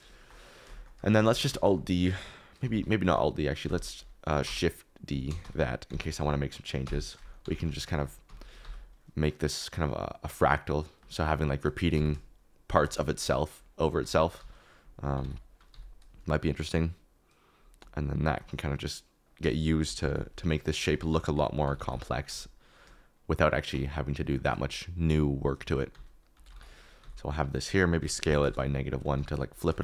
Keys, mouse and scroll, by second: 0.1 shift+middle click, 0.7 shift+middle click, 1.3 alt+d, 1.5 shift+z, 2.7 ctrl+z, 3.0 x, 3.7 ctrl+z, 4.4-8.6 typing, 5.1 click, 11.9 g, 13.0 shift+click, 14.0 alt+d, 14.3 r, 15.1 9, 15.3 0, 15.7 g, 19.3-22.2 typing, 20.8 ctrl+z, 25.5 alt+d, 25.9-29.1 typing, 28.4 Return.